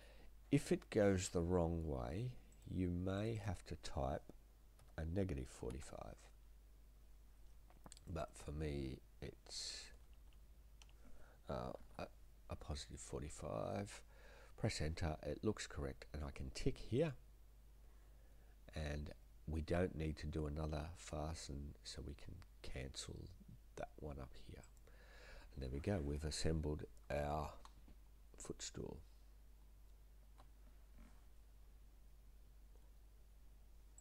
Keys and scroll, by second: 4.8-6.0 typing, 6.3 Return, 10.1 BackSpace, 10.3 BackSpace, 11.5-13.1 typing, 13.1 Return.